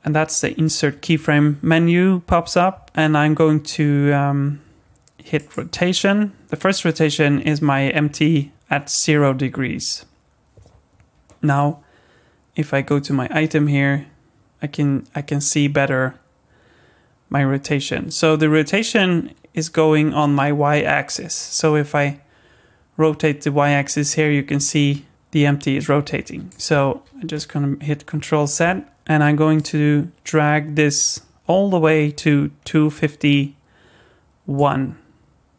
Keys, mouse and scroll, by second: 12.9 click, 21.5 click, 27.1 ctrl+z, 29.6 click.